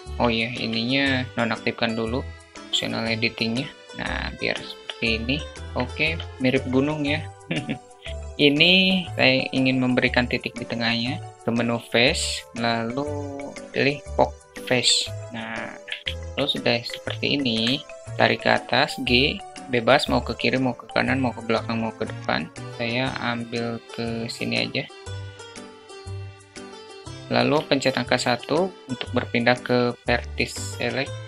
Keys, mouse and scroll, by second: 0.0 click, 1.3-2.8 drag, 3.1 s, 3.7 `, 5.7 Tab, 7.4-8.0 alt+middle drag, 11.3-13.6 drag, 16.1-16.7 alt+shift+middle drag, 16.9 shift+middle click, 17.9 g, 26.8 alt+middle click, 27.1 alt+shift+middle click.